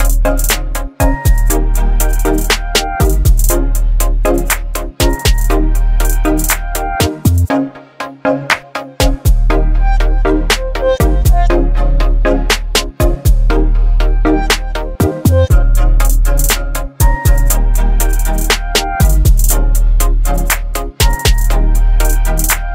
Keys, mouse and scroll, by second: 4.1-6.5 shift+drag, 7.9-16.7 shift+drag, 11.2-13.3 drag, 17.3 Return, 20.0 click.